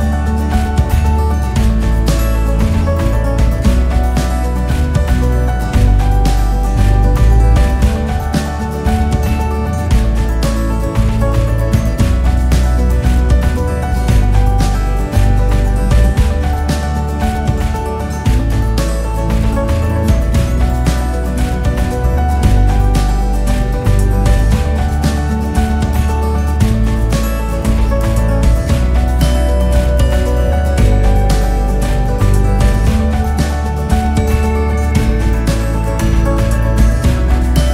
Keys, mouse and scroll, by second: 0.1 click, 0.8 click, 1.4 KP_1, 2.2 e, 5.2 click, 5.9-11.6 typing, 12.9 KP_1, 13.7-14.9 drag, 14.9 ctrl+r, 20.1-21.3 drag, 21.3 ctrl+r, 26.1 KP_8, 26.3 KP_Divide, 27.2 KP_8, 27.5-29.5 drag, 29.5 x, 30.5 click, 30.8 x, 31.4 click, 31.7 x, 32.5 click, 32.8 x, 34.5 click, 35.4-37.1 drag.